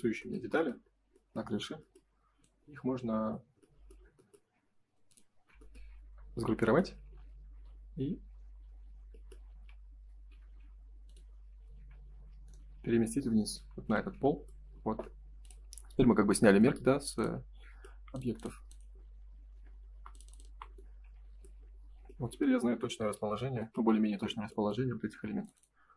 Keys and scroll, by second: 9.5 F3, 10.3 F4, 11.7 Escape, 14.6 space, 19.8 Delete, 23.1 shift+h.